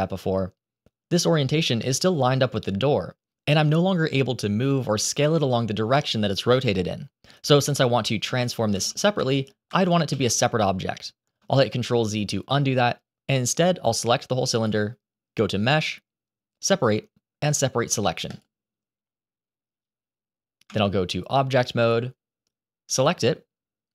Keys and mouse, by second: 2.3 click, 8.2 ctrl+z, 8.6 ctrl+z, 9.1 ctrl+z, 9.6 ctrl+z, 10.0 ctrl+z, 14.9-18.3 drag, 20.6 Tab.